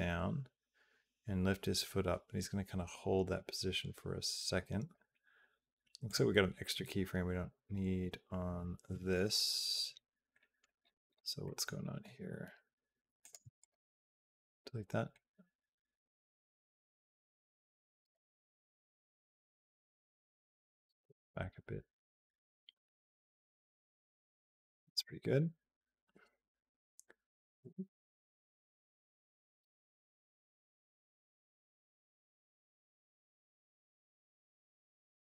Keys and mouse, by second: 5.9 click, 6.6 Down, 7.2 Up, 7.8 Up, 8.3 Down, 10.2 middle click, 11.2 middle click, 13.0 click, 13.2 x, 14.9-17.9 drag, 18.6 g, 20.1-35.2 drag.